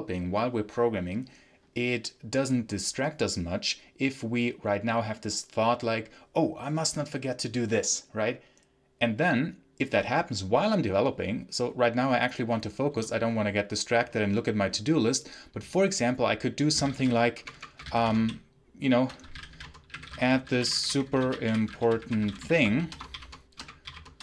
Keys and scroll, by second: 16.4-23.9 typing.